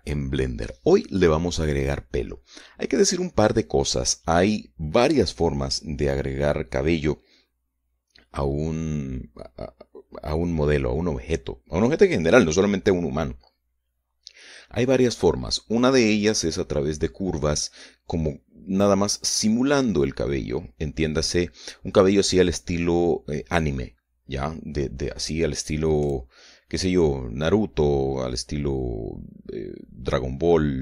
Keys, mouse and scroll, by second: 0.1-1.2 shift+middle drag.